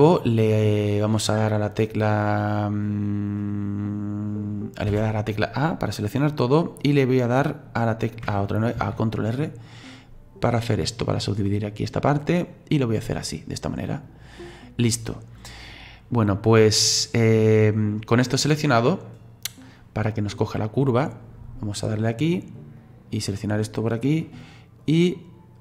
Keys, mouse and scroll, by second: 4.9 a, 8.8 ctrl+r, 18.2 click, 21.9 click, 22.8 right click, 23.9 middle click, 24.8-25.6 drag.